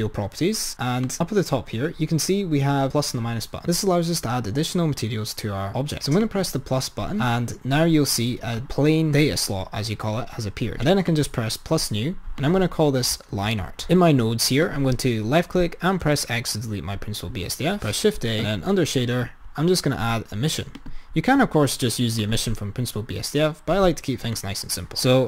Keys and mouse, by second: 1.1-3.6 drag, 6.3-8.4 drag, 11.1-13.7 drag, 14.8 click, 16.6 x, 18.0 shift+a, 24.5 drag.